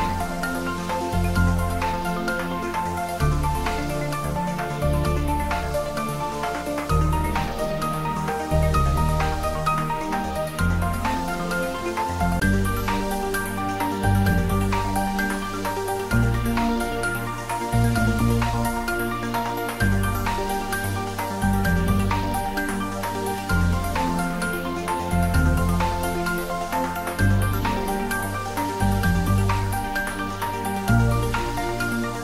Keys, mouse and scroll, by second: 5.0 click, 6.8 scroll up 1, 7.6 g, 7.9 z, 8.5 Down, 9.9 click, 11.8 i, 13.3 click, 13.6-14.3 middle click, 14.4 scroll down 1, 16.6 s, 19.0 click, 20.2 e, 22.9 click, 23.2-24.7 middle drag, 26.8 i, 29.3 click, 29.6-30.1 scroll up 1, 32.0 e.